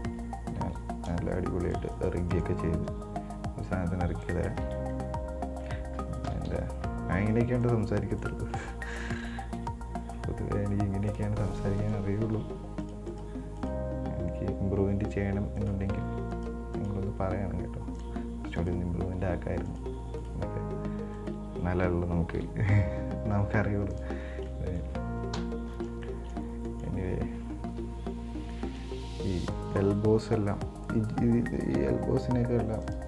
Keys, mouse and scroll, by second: 0.1 right click, 1.0 g, 2.1 right click, 2.5 right click, 3.1 g, 5.0 scroll down 3, 5.1-6.1 middle drag, 6.1-6.5 scroll up 1, 6.5 KP_1, 6.6 KP_3, 7.3-7.6 scroll up 5, 7.8 right click, 8.4 right click, 9.8 g, 11.6 right click, 12.0 right click, 12.5 g, 13.3 right click, 13.8 right click, 14.3 g, 16.6 right click, 17.0 right click, 17.3 g, 18.8 right click, 19.3 g, 20.5 right click, 21.4 right click, 22.6 g, 24.5 scroll down 7, 24.6 middle click, 25.6 KP_1, 26.2 scroll down 1, 26.3 shift+middle click, 26.7 scroll down 2, 26.8 middle click, 27.3-27.9 scroll up 5, 27.9 KP_1, 28.7 shift+middle click, 29.2-29.6 scroll up 4, 29.6 right click, 32.0 g.